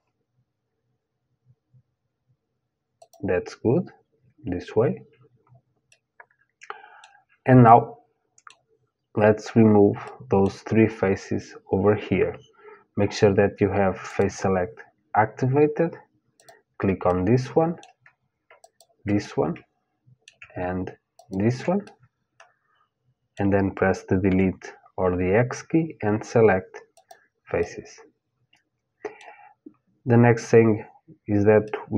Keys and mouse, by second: 5.5-9.3 middle drag, 9.6-11.6 middle drag, 13.7-15.7 drag, 16.0-20.2 drag, 20.2 middle click, 20.8 click, 20.9 middle click, 21.5-22.9 drag, 22.9 middle click, 23.9 Delete, 27.2-29.2 middle drag, 31.2-31.9 middle drag.